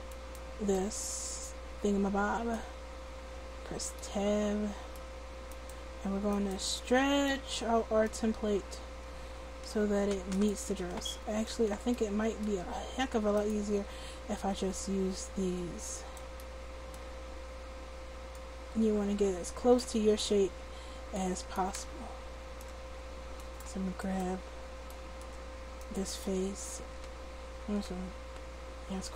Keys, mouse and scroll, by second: 3.4 Tab, 5.5-8.3 middle drag, 8.3 right click, 9.1 click, 10.7 ctrl+z, 11.3 Tab, 13.4 click, 14.7 click, 18.3-20.2 drag, 22.8 Tab, 27.5 a, 27.9 a, 28.8 a.